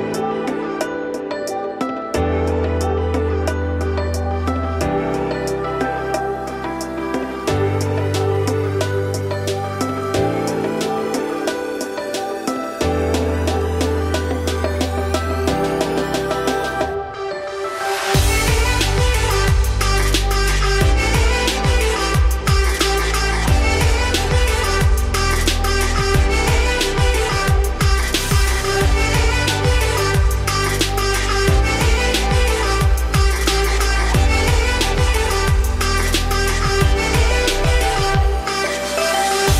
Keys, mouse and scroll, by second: 0.2 scroll down 4, 0.4 middle click, 0.9-1.3 scroll up 4, 1.4 middle click, 1.6-2.2 scroll up 5, 2.2-3.9 scroll down 3, 3.9 ctrl+r, 5.2 4, 5.3 click, 6.5 scroll up 2, 6.7 3, 7.0 click, 7.4 alt+click, 8.0 s, 10.4 scroll down 1, 10.6-11.6 middle drag, 11.6 ctrl+z, 12.0 ctrl+z, 12.5 Tab, 12.7-14.1 right drag, 14.1 click, 14.6 middle click, 15.3 click, 15.6 middle click, 16.0 click, 16.2 Tab, 16.4 middle click, 16.8 2, 17.0 click, 17.3 alt+click, 17.7-18.1 scroll up 2, 18.1 ctrl+b, 19.9 Tab, 20.1 scroll down 3, 20.3-22.0 middle drag, 22.0-22.7 scroll down 8, 22.7 click, 22.9 scroll down 1, 23.0-24.0 middle drag, 24.0-24.6 scroll up 4, 24.6-25.1 scroll down 5, 25.1 click, 25.7-26.4 middle drag, 26.4-26.9 scroll up 6, 26.9 click, 27.1-27.9 scroll up 3, 27.9 shift+click, 28.4 shift+click, 28.9 ctrl+click, 29.2-29.9 middle drag, 29.9 s, 32.3 g, 33.1 click, 33.5 g, 37.3 click, 37.6 scroll down 1, 37.7-38.6 middle drag, 38.6 ctrl+s, 38.8 scroll down 5, 39.1-39.5 middle drag.